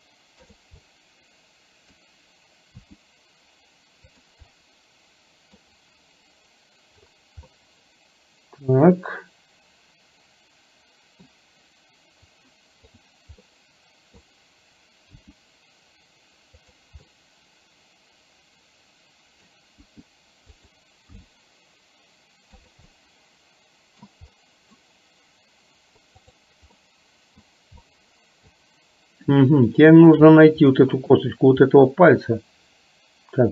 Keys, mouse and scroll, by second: 0.9-2.0 middle drag, 3.0 r, 4.6-5.7 middle drag, 7.5-11.4 middle drag, 13.0 click, 13.6 middle click, 15.2 r, 17.2-19.6 middle drag, 20.0 r, 21.2 g, 23.0-24.0 scroll up 1, 24.0 middle click, 24.1 scroll down 1, 24.4-24.7 middle drag, 26.9 middle click, 27.9 middle click, 29.9-30.2 shift+middle drag, 30.7-31.2 middle drag, 31.7-33.5 middle drag.